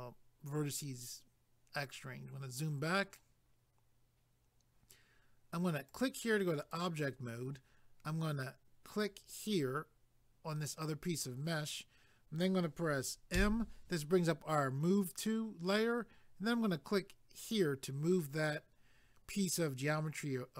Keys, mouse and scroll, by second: 2.2 scroll down 1, 5.9 click, 6.6 click, 8.9 click, 17.4 click.